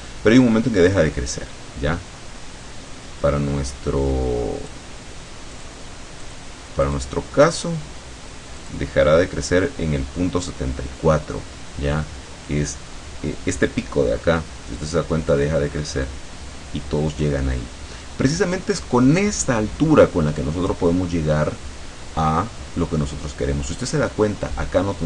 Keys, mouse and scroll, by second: 1.0-4.9 drag, 5.6 click, 6.3 click, 6.9 click, 7.6 click, 8.7 click, 15.4-18.9 drag, 20.5-22.8 middle drag, 22.9-23.3 scroll up 1.